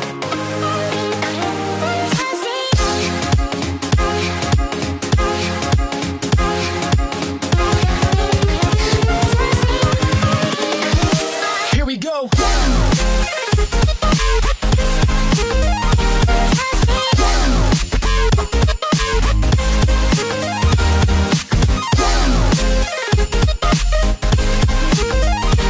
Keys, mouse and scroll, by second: 3.4 s, 12.2 click, 15.2 click, 18.6 click, 21.7 KP_3, 22.7 KP_1, 24.6 click.